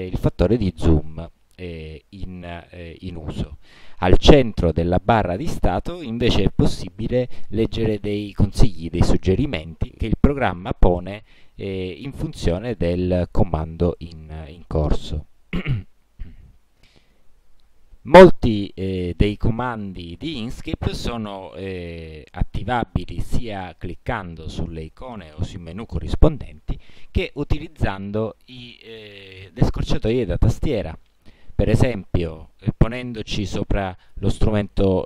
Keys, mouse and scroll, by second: 25.3 click, 28.1 click.